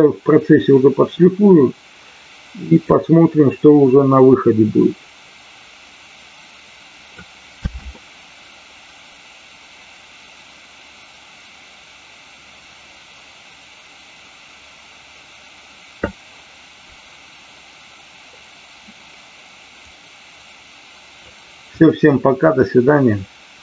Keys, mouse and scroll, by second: 7.5 space, 18.4 click, 19.9-21.2 drag.